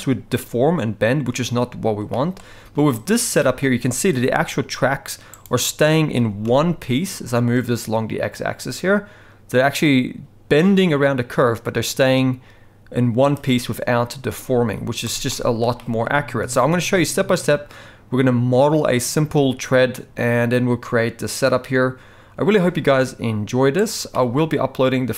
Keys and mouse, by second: 2.1 shift+middle drag, 2.9 click, 3.4 shift+middle drag, 4.4 g, 6.2 g, 14.8 z, 15.3-15.6 middle drag, 15.8 shift+middle drag, 16.4 g, 19.9 typing, 24.1-25.1 middle drag.